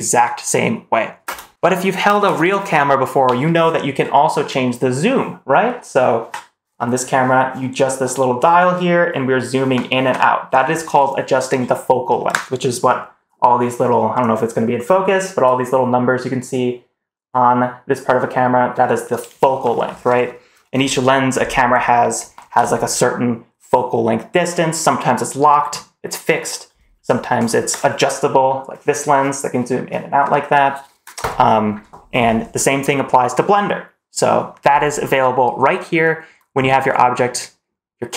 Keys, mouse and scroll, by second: 1.1 space.